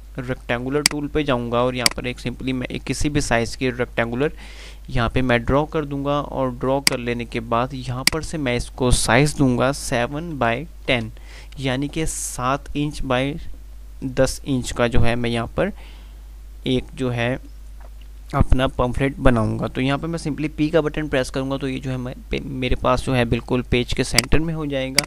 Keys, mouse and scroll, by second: 1.1-5.9 drag, 10.4 Tab, 21.1 p, 24.4-25.0 drag.